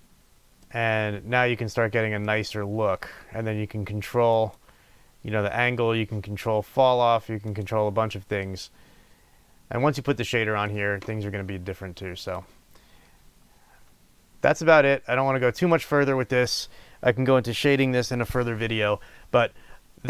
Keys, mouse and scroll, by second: 1.0-2.2 scroll down 2, 4.3 click, 7.4 click, 8.3-12.2 middle drag, 12.2 click, 12.9-20.0 middle drag.